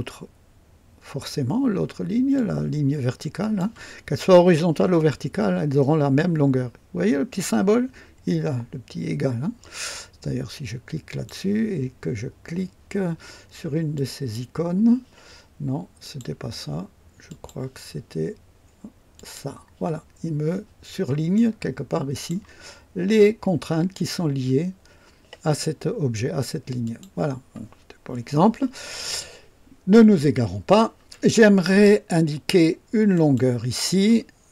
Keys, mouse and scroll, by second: 2.3-3.7 drag, 11.0 click, 13.9 click, 16.0 click, 17.2 click, 19.1 click, 21.3-22.4 drag, 26.8 click, 33.1 click.